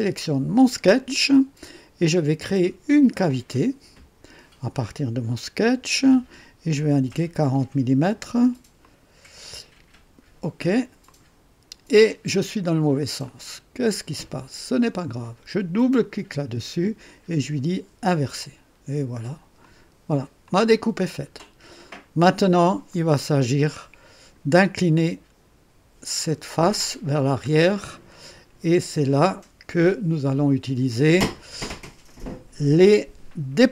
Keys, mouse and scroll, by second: 0.6 click, 3.2 click, 6.7 4, 7.1 0, 8.8 click, 11.0 click, 12.8 scroll down 1, 13.2-13.9 right drag, 15.8 click, 18.0 click, 19.6 click, 20.5-22.9 drag, 22.9 right click, 23.8 click.